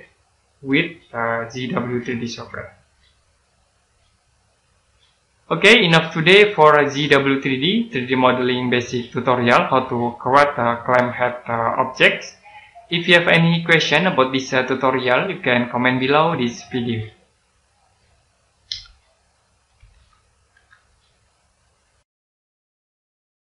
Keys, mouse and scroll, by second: 3.1 middle click, 3.4 scroll up 1, 3.9 middle click.